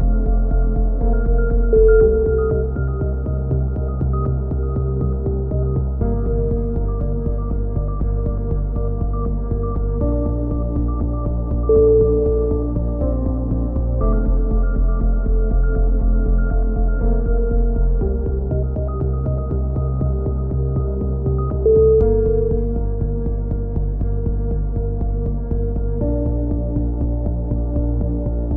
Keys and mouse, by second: 0.0-0.6 typing, 2.2 e, 2.4 click, 7.8 click, 8.4-10.6 middle drag, 9.0 s, 12.1 c, 13.3 right click, 14.0 click, 15.5 ctrl+z, 15.9 a, 16.1 z, 16.6 z, 16.8 middle click, 17.0 z, 17.3 click, 18.4 KP_3, 18.6 z, 19.3 ctrl+r, 21.6 a, 22.1 b, 23.2-25.2 middle drag, 25.2-27.9 drag, 27.9 a, 28.4 z.